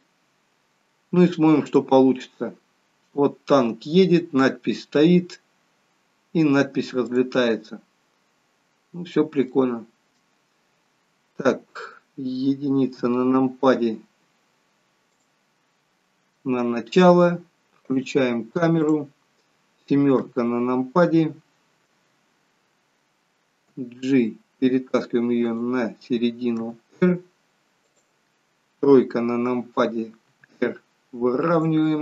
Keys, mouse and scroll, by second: 1.7 click, 7.2 click, 8.5-9.5 scroll up 1, 9.5 scroll up 1, 9.6 shift+middle click, 13.1 KP_1, 15.1 click, 16.5 shift+middle click, 18.0 click, 18.8 click, 20.3 KP_7, 21.4-23.2 scroll down 4, 23.2-23.6 scroll down 3, 23.6 g, 26.7 r, 28.9 KP_3, 30.4 r.